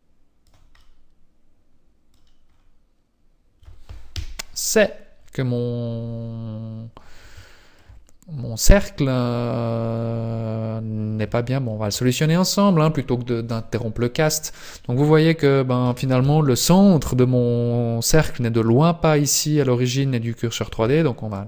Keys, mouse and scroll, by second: 0.8 middle click, 2.5-4.0 scroll down 4, 4.1 KP_1, 4.7 scroll up 3, 6.6-7.3 scroll up 1, 7.4 shift+middle click, 11.3 shift+middle click, 12.7-14.1 scroll down 1, 14.1-14.5 scroll up 1, 14.7 middle click, 16.2 KP_1, 19.4 scroll up 1.